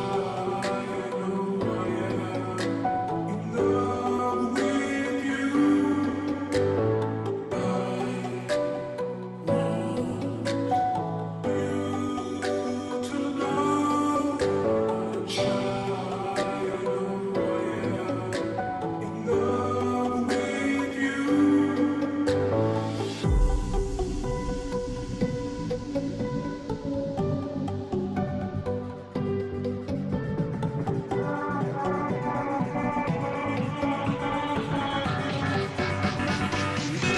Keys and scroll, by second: 33.0 space, 33.1 space, 34.1 space, 34.4-37.1 space.